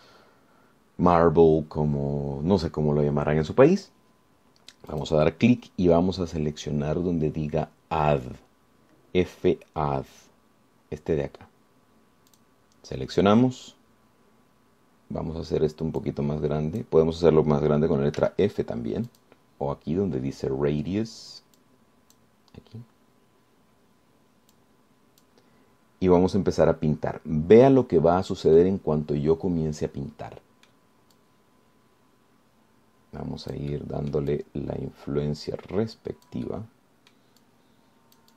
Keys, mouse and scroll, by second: 6.1 click, 13.5 click, 17.2-18.2 drag, 19.4 f, 20.3 click, 22.8 click, 25.7 click, 29.8-32.1 middle drag, 32.4-38.3 drag.